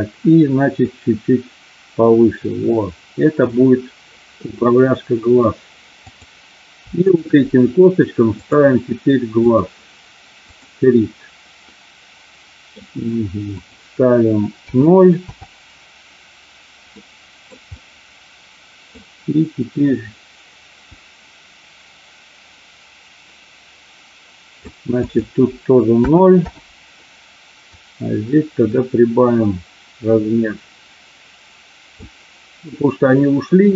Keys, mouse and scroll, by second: 0.7-3.5 drag, 4.4-5.4 middle drag, 7.1 shift+click, 8.4-9.6 drag, 11.7-12.7 middle drag, 13.5-15.6 drag, 16.9 middle click, 17.9-18.9 middle drag, 20.8-24.8 drag, 25.0-26.6 drag, 27.6-32.0 drag.